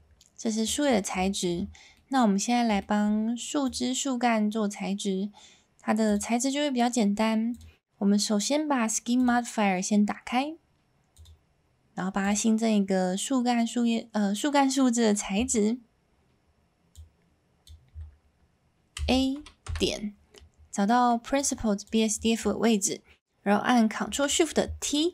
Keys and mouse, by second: 0.0 click, 1.2 shift+middle drag, 1.9 middle drag, 2.8 shift+middle drag, 6.1 click, 7.5 click, 12.2 click, 17.0 click, 21.0 middle click, 21.4 click, 24.0 s.